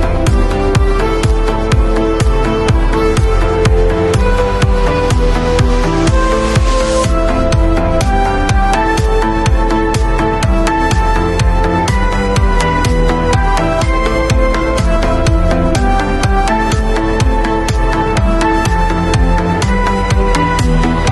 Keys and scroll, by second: 13.3 b, 14.7 ], 17.8 ].